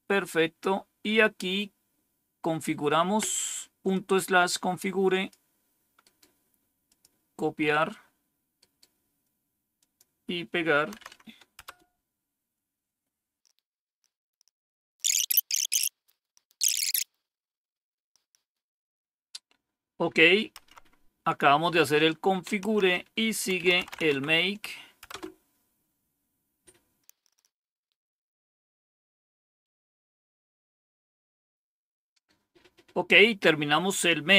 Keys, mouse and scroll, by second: 3.8-5.2 drag, 5.9 right click, 6.8 click, 8.5 right click, 9.6 click, 10.9 Right, 11.5 Return, 20.5 Up, 22.6 Down, 23.2-24.4 typing, 25.0 Return, 27.1 click, 33.8 click.